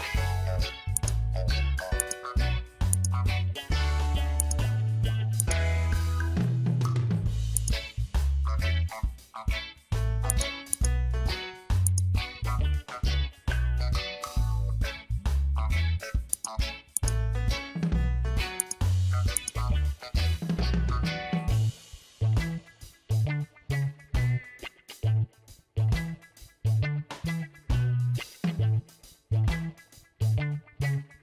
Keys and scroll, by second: 5.8 Return, 12.9 ctrl+d.